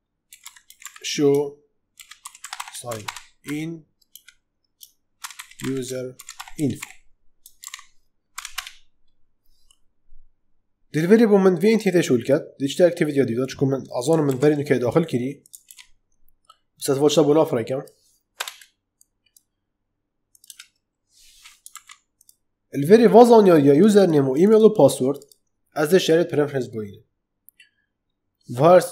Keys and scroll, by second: 0.0-8.2 typing, 8.4 Return, 14.2 ctrl+c, 15.6 ctrl+v, 18.3 BackSpace, 20.4 BackSpace, 21.6 ctrl+z.